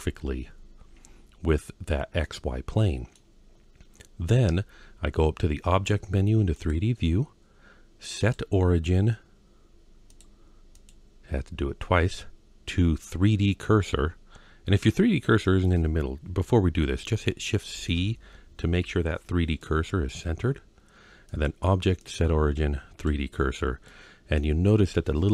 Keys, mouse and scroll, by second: 2.1-3.0 middle drag, 6.4-8.8 drag, 9.9-14.5 drag, 17.5 shift+c, 18.4-19.2 scroll down 2, 19.4-19.9 middle drag, 21.1-22.9 drag, 23.3-23.7 scroll down 1, 23.7-24.2 middle drag.